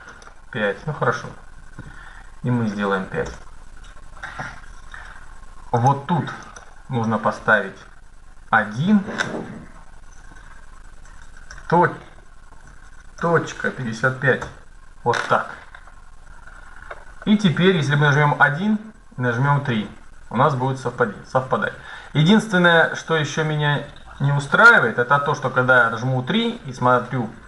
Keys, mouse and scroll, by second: 1.4 BackSpace, 5.5-7.3 drag, 8.1 BackSpace, 13.7 KP_5, 16.3-18.9 middle drag, 17.8 KP_1, 19.2-21.9 typing, 23.1 KP_1, 24.4 KP_3, 25.6-26.7 middle drag, 26.9 middle click.